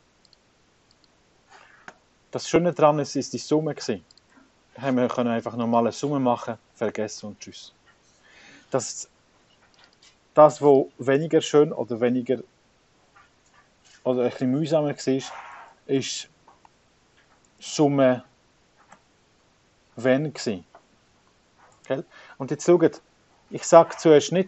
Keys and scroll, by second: 0.5 v, 1.3 Return, 2.2 -, 15.3 0, 16.3-20.4 typing, 18.7 Return, 20.5 Tab.